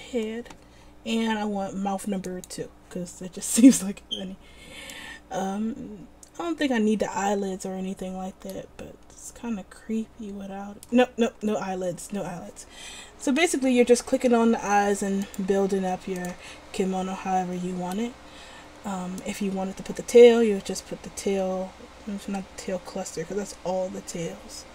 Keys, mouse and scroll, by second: 3.3-4.9 middle drag, 7.6-8.6 middle drag, 15.4-18.1 middle drag.